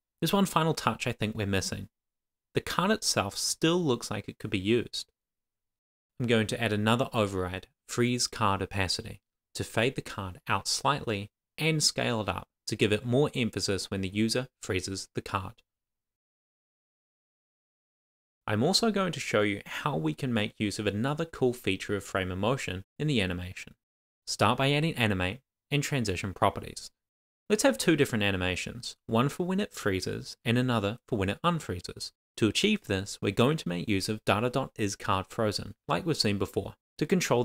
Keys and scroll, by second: 21.1 Return, 22.1 shift+;, 22.3 shift+[, 22.7 Return, 24.4 shift+;, 24.4 shift+space, 26.0 Tab, 26.8 shift+/, 28.0 shift+;, 28.1 shift+space, 29.7 super+s.